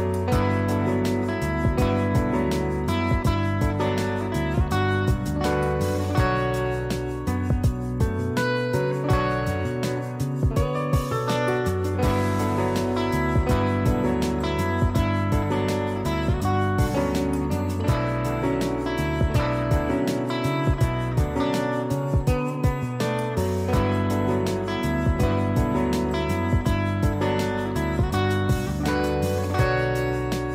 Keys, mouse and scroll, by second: 3.3 click, 12.9 z, 13.4 click, 21.0 click, 22.9 click, 26.1 click, 29.1 click.